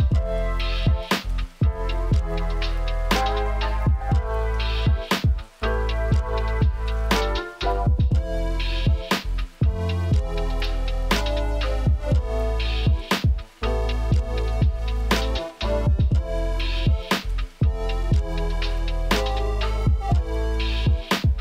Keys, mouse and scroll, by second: 1.1 shift+a, 2.2 click, 3.0 click, 3.4 click, 4.7 Tab, 5.1 alt+s, 5.9 r, 7.2 click, 7.5 alt+s, 8.5 click, 8.7 alt+s, 9.4 Tab, 10.0 Tab, 10.0 a, 10.2 s, 11.6 click, 11.9 shift+click, 12.7 click, 13.8 click, 14.1 shift+click, 15.7 Tab, 16.3 click, 16.7 KP_3, 17.7 Tab, 18.7-20.9 drag, 20.8 g.